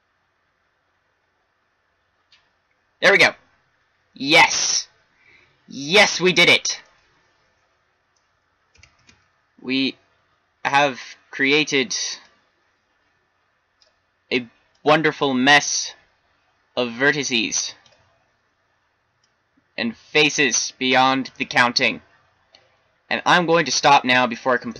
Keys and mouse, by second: 6.4 shift+z, 8.9 shift+d, 21.2 middle click, 23.1-23.8 middle drag, 23.8 middle click.